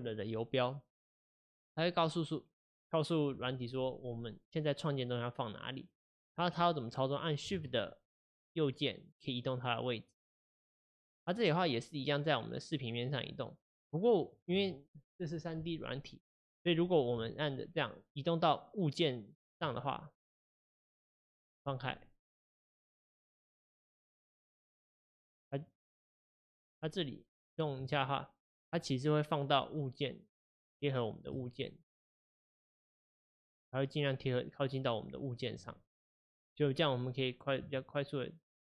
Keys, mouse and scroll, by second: 8.1-11.2 shift+right drag, 17.4-20.4 shift+right drag, 22.0-23.5 middle drag, 23.5-24.8 shift+right drag, 24.8-26.1 middle drag, 26.1 shift+right click, 26.8-28.0 middle drag, 28.0 shift+right click, 28.7-30.9 middle drag, 30.9-31.5 shift+right drag, 31.5-32.6 middle drag, 32.6-33.2 shift+right drag, 33.2-35.9 middle drag, 35.9-36.4 shift+right drag, 36.4-37.9 middle drag, 37.9 shift+right click.